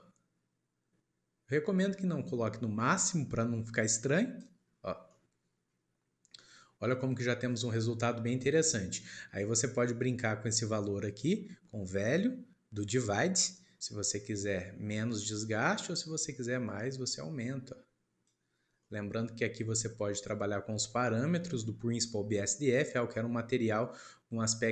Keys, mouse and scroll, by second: 4.7 scroll down 1, 5.2-11.8 middle drag, 12.8 middle click, 18.6 scroll down 2, 18.8-24.7 middle drag.